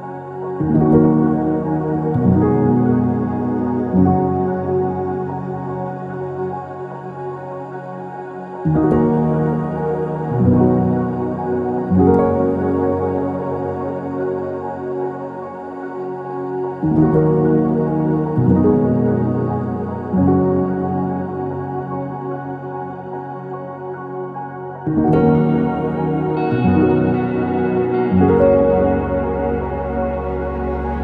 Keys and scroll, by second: 0.1 ctrl+z, 5.8-11.1 typing, 7.5 ctrl+z, 11.4 ctrl+s, 21.7-23.0 typing, 26.8 Return, 26.8 typing, 27.8 Escape, 30.2-31.0 typing.